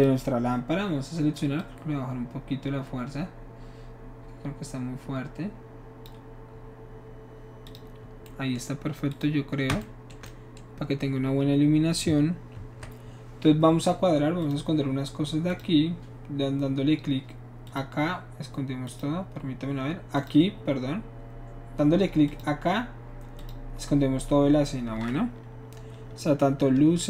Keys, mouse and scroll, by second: 1.6-6.1 drag, 7.7 click, 9.1 click, 12.5 ctrl+s, 14.4 click, 15.5 click, 17.6 click, 18.9 click, 20.2 click, 22.3 click, 23.4 click, 26.9 n.